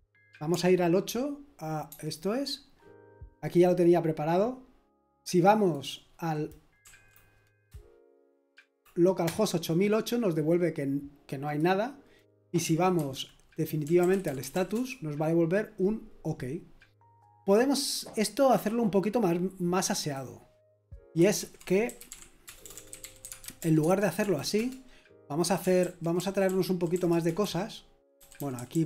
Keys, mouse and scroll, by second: 1.9 super+8, 8.3 Delete, 12.9-15.2 typing, 19.7-20.5 typing, 20.0 click, 21.3 ctrl+c, 21.6-24.1 typing, 24.2 Right, 24.5 Return, 25.8 ctrl+d, 26.1 ctrl+d, 26.2-28.8 typing.